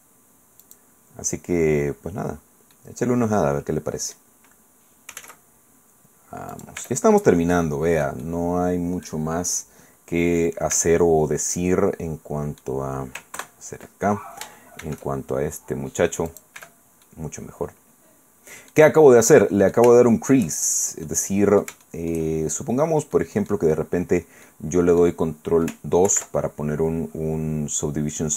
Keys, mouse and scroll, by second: 0.6 click, 2.7-4.3 drag, 4.8-5.7 typing, 6.5 click, 6.8 Tab, 8.2-9.4 drag, 10.7 Tab, 11.5-12.8 drag, 13.4 ctrl+KP_Add, 14.8 shift+e, 16.3 click, 16.6 Tab, 17.0-18.9 drag, 18.9 middle click, 19.0 scroll down 2, 19.2-20.5 drag, 21.1 click, 21.8 shift+middle click, 22.1 shift+click, 22.2 shift+middle click, 22.9 scroll down 2, 23.1 middle click, 23.7-24.4 scroll down 2, 24.4 middle click, 26.1 ctrl+2, 27.1-28.0 scroll up 2, 28.0 scroll up 1.